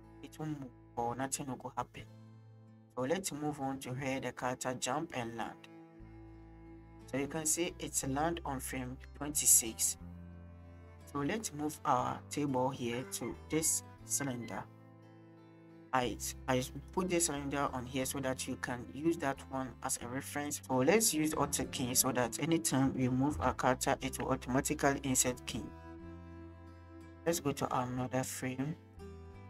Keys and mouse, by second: 10.9 middle click, 11.4 shift+drag, 12.6 drag, 20.5 click, 21.6 click, 23.3 i, 27.3 middle click, 28.1 drag, 29.0-29.4 middle drag.